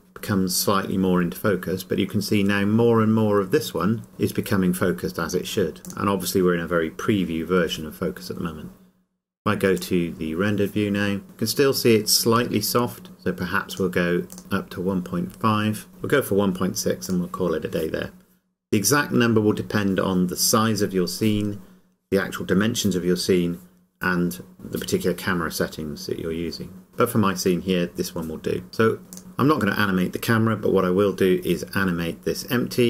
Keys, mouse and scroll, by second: 3.4 click, 3.7 scroll up 1, 9.8 click, 13.7 click, 17.1 click, 28.7 scroll down 1, 29.1 click.